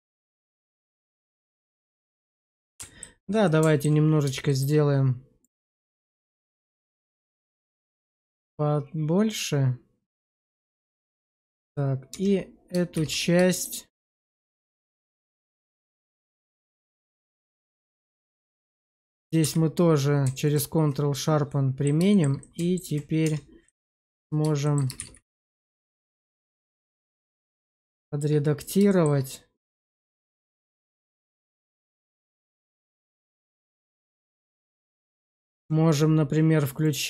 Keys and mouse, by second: 3.3 alt+middle click, 4.4 shift+middle click, 5.3 click, 10.7 Tab, 12.0 Tab, 12.9 shift+z, 13.4 shift+middle click, 15.2-16.4 middle drag, 16.5 shift+z, 17.1 middle click, 17.6 Tab, 18.2 middle click, 18.5 shift+middle click, 19.1 click, 19.3 q, 21.0 middle click, 22.0 shift+middle click, 22.3 alt+middle click, 23.1 Tab, 23.6 alt+middle click, 24.5 shift+middle click, 24.9 shift+z, 25.3 shift+middle click, 26.0 click, 27.5 shift+click, 28.8 shift+click, 29.8 click, 34.4 shift+middle click, 36.7 click.